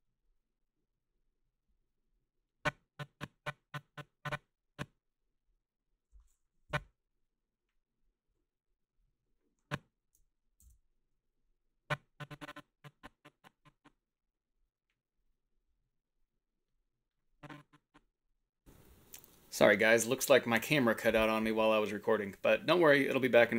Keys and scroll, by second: 6.7 Left.